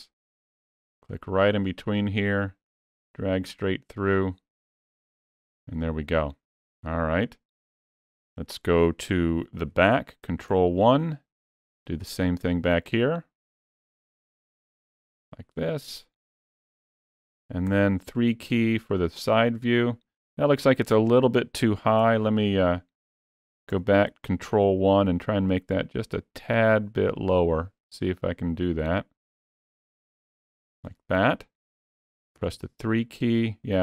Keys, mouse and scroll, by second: 1.8 click, 10.3 ctrl+KP_1, 13.6 click, 17.5 KP_3, 21.9 ctrl+z, 23.5 ctrl+KP_1, 27.1 click, 32.4 KP_3.